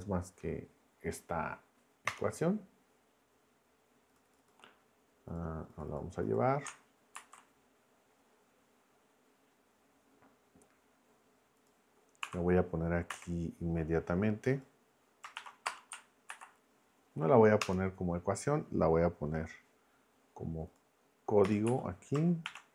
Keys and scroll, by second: 2.1 Return, 7.1 super+c, 12.2 Escape, 13.1 b, 15.3 shift+3, 15.6 space, 16.3 super+v, 17.6 Return, 21.4 Return, 21.6 Up, 22.5-22.7 typing.